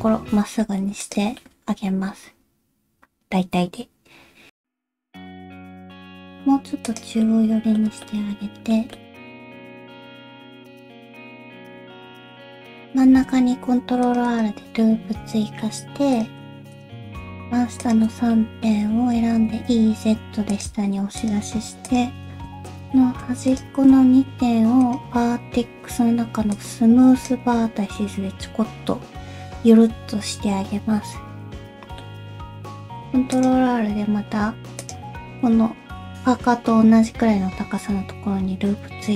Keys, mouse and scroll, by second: 1.4 middle click, 3.8-4.3 scroll up 1, 4.5 scroll down 1, 4.5 g, 7.2 middle click, 8.0 middle click, 8.9 middle click, 9.2 g, 9.6 middle click, 10.0 shift+middle click, 10.3 middle click, 10.3 scroll up 1, 10.6 middle click, 10.8 middle click, 11.2 g, 11.7 middle click, 11.9 scroll down 1, 12.2 scroll up 3, 12.3 middle click, 13.0 ctrl+r, 14.8 middle click, 16.1 click, 16.7 shift+click, 16.9 ctrl+z, 17.1 shift+click, 17.8 shift+click, 18.2 scroll down 1, 18.3 middle click, 19.4 e, 21.2 click, 21.8 shift+click, 22.3 click, 22.6 shift+click, 23.5 shift+click, 24.8 click, 27.9 middle click, 31.6 middle click, 32.8 ctrl+r, 35.1 middle click, 36.7 middle click.